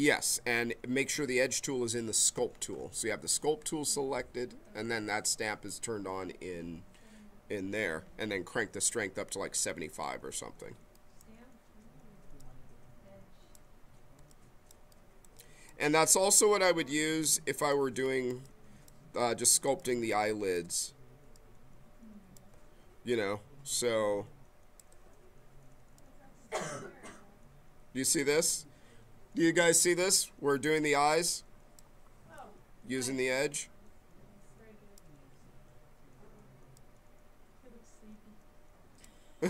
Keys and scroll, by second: 19.6 b.